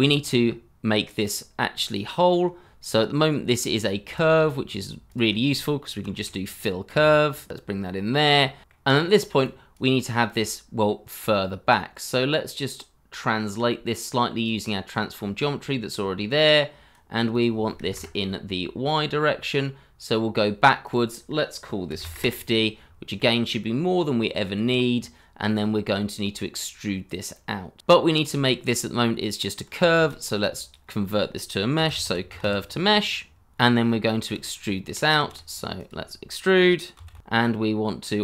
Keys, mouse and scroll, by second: 0.5-2.5 scroll up 1, 5.0 double click, 5.8 BackSpace, 5.9 i, 6.1 l, 8.1-8.5 scroll down 1, 8.5 middle click, 15.2-17.8 scroll up 1, 17.8 0, 17.9 Return, 21.9 5, 22.0 KP_0, 22.1 Return, 22.8 scroll down 1, 23.1 middle click, 27.8-28.1 scroll up 1, 28.3-28.9 scroll down 1, 29.0 shift+a, 30.0-30.5 typing, 31.6 space, 31.7 t, 31.7 o, 33.8 middle click, 35.1 shift+a, 36.5 e, 36.7 t.